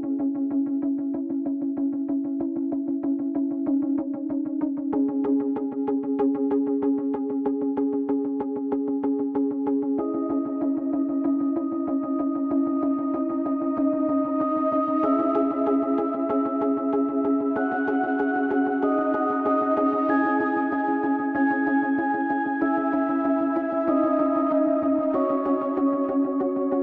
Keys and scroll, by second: 2.3 s, 5.0 shift+Tab, 5.9 s, 6.2 z, 9.5 Tab, 12.5 Tab, 15.7 Tab, 16.8 ctrl+r, 21.1 a, 21.7 z, 22.1 b, 25.1 s, 25.4 x.